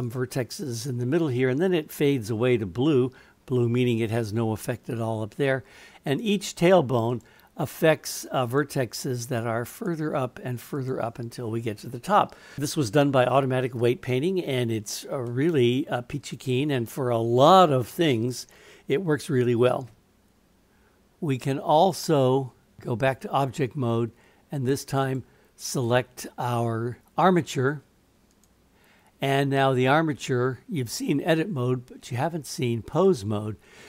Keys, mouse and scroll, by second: 6.1 click, 7.1 click, 8.5 click, 9.8 click, 10.8 click, 15.3-16.8 middle drag, 19.9-21.9 drag, 22.8 click, 25.1 click, 28.3-33.1 drag.